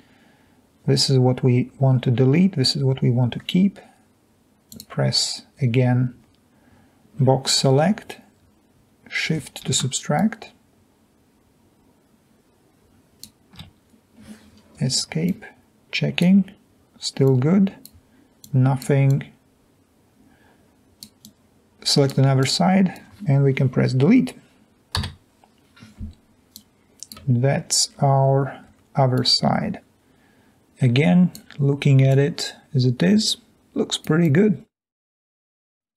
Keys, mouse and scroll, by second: 10.5-13.2 shift+drag, 14.9 Escape, 15.3-15.8 drag, 17.3-17.7 drag, 22.6 click, 25.1 Delete, 26.5 click, 27.5-28.0 scroll up 1, 28.0-29.4 scroll down 2, 29.2 click, 34.7 click, 35.2-35.7 scroll down 2, 35.7-35.9 scroll up 2.